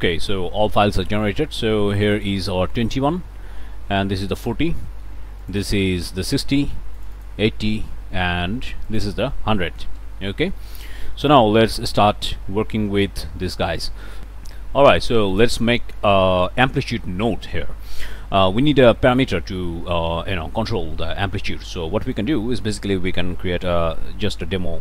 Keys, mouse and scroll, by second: 0.2 click, 0.5-1.4 scroll up 2, 0.8 click, 2.0 click, 4.2 click, 5.4 click, 7.0 click, 7.4-8.9 scroll up 1, 8.9 click, 9.6 click, 10.3-10.7 scroll down 2, 10.7 click, 10.8 scroll up 1, 11.2 click, 11.4 scroll down 2, 11.6 click, 11.7 scroll up 1, 12.1 click, 13.4 scroll up 2, 13.7 click, 14.1 scroll down 1, 14.2 click, 15.4 click, 17.0 click, 17.5-18.0 scroll up 2, 18.0 click, 21.5 click, 22.0 click, 22.5 Tab, 23.6-24.4 typing, 24.6 Down.